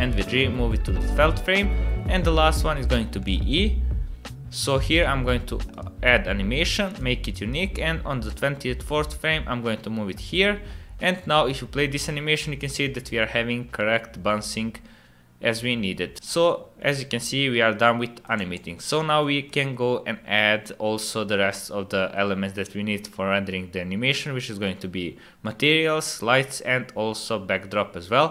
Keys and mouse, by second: 2.4-2.9 shift+drag, 3.2 click, 5.0 click, 6.9 click, 7.5-8.4 drag, 8.9 g, 10.7 space, 16.3-18.2 middle drag, 18.4 KP_1, 19.2 shift+middle drag.